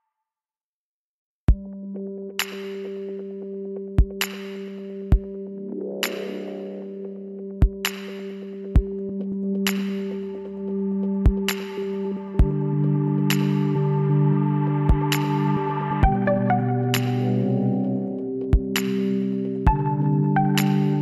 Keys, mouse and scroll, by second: 0.2 middle click, 2.1-4.2 middle drag, 4.2 right click, 4.2 c, 11.5 right click, 12.0-14.3 middle drag, 16.9 KP_1, 18.8 KP_4, 19.4 KP_3, 20.9-21.0 middle drag.